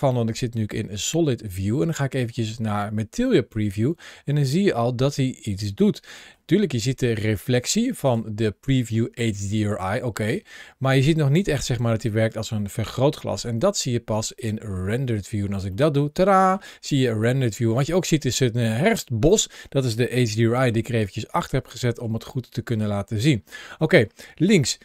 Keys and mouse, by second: 0.5-0.8 middle drag, 1.7 click, 2.7-6.3 middle drag, 8.1-9.7 drag, 10.1-13.0 middle drag, 15.5 middle click, 17.1-17.6 middle drag, 19.2 middle click, 20.2-20.6 shift+middle drag, 21.8 shift+middle click, 22.3 middle click, 23.4 shift+middle click.